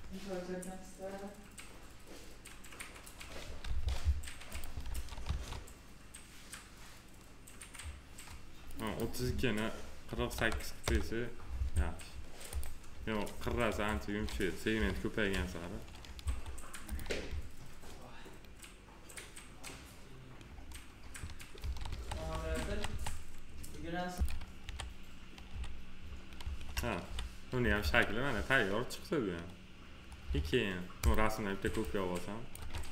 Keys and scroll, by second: 3.6 ctrl+z, 10.1 4, 10.8 Return, 13.4 F4, 14.7 p, 16.1 F4, 21.5 ctrl+s, 24.6 f, 27.0 f.